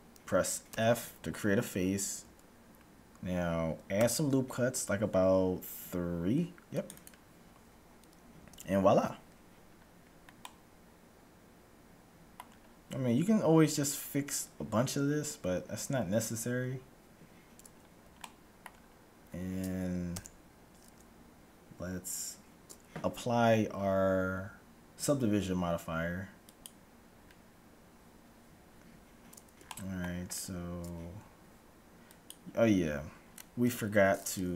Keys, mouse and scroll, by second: 0.6 f, 4.1 ctrl+r, 8.6 a, 8.7-12.2 middle drag, 17.7-18.2 scroll down 1, 18.2-19.7 middle drag, 19.7-20.1 scroll down 1, 20.1 Tab, 20.1-22.6 middle drag, 26.6-28.4 drag, 29.7-31.4 middle drag, 31.4-31.9 scroll up 1, 31.9 middle click, 32.2-33.6 drag, 33.2-34.5 middle drag, 33.6 Tab.